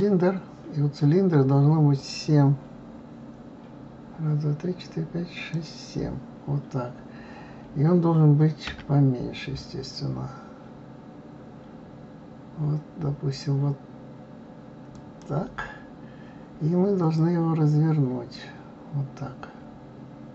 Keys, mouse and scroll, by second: 1.9-4.9 drag, 17.1-20.1 drag.